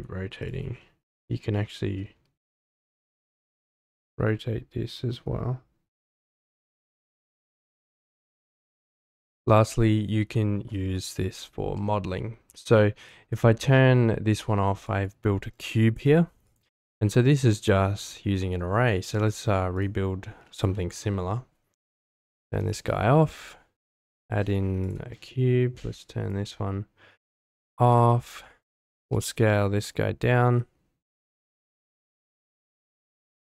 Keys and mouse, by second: 0.4 click, 8.5 ctrl+shift+F2, 14.8 click, 16.0 middle drag, 16.4 click, 19.7 click, 22.7 shift+a, 26.0 click, 28.1 middle drag, 28.6 Tab, 29.0 s, 29.1 z, 32.0 click, 33.1-33.4 middle drag.